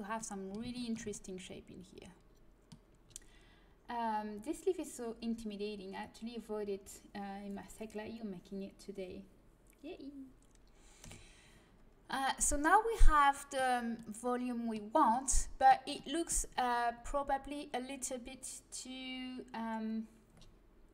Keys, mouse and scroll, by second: 10.9 KP_1, 15.1-19.2 middle drag.